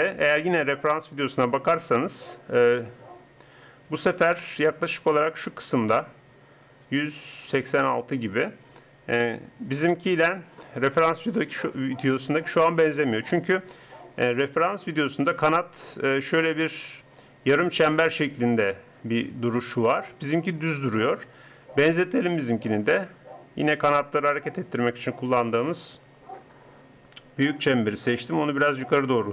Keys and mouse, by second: 22.2-24.1 drag, 23.7 r.